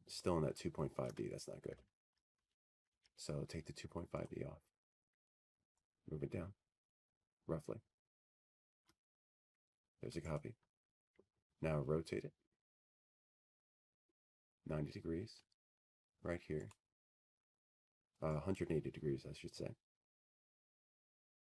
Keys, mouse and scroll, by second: 0.7 middle click, 6.6 shift+click, 7.9 Escape, 9.9 click, 14.4 shift+click, 15.9 click.